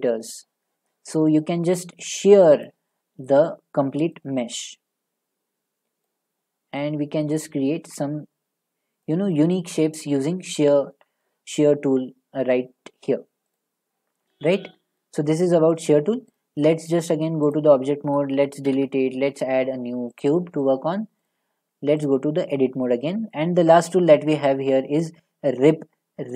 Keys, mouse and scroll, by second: 2.6 click, 4.1 middle click, 6.1 click, 9.1 click, 11.2 scroll, 12.4 scroll, 13.6 click, 15.0 middle click, 16.4 click, 16.9 click, 17.5 click, 18.7 Delete, 19.2 a, 20.2 click, 21.3 click, 22.1 click, 22.9-24.1 scroll.